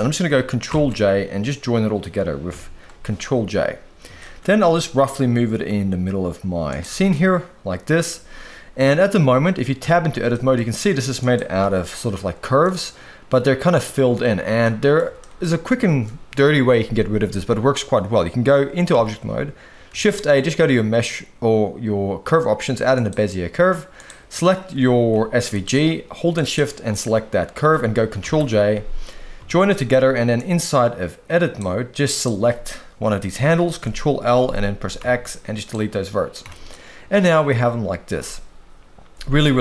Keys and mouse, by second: 0.7 ctrl+j, 2.5 KP_1, 4.2 shift+middle drag, 4.6 g, 7.1-8.1 middle drag, 8.9 shift+middle click, 9.8 Tab, 10.3 shift+middle click, 11.2 click, 11.6 g, 14.6 middle click, 15.2 shift+middle click, 15.8 Tab, 19.0 alt+a, 19.9 shift+a, 23.9 click, 25.1 g, 26.3 shift+click, 28.2 ctrl+j, 29.4 Tab, 30.4-31.6 drag, 32.1 click, 33.8 ctrl+l, 34.9 x, 36.4 a, 36.7 middle click.